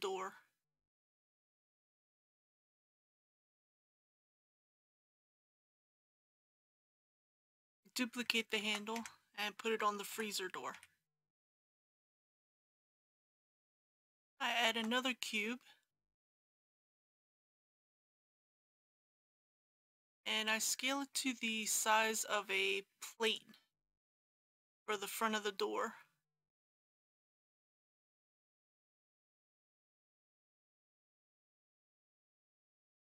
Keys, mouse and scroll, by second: 2.9 click, 4.8 KP_1, 6.2 scroll down 1, 8.5 shift+d, 10.1 g, 10.7 z, 13.0 click, 14.6 shift+a, 16.2-17.3 drag, 17.7 s, 18.8 click, 19.2 g, 24.0 scroll down 1, 24.9-26.3 middle drag, 26.7 g, 26.9 y, 28.0 click, 28.3-29.7 typing, 29.6 click, 31.5 click, 31.7 KP_3, 31.9 s, 32.0 y.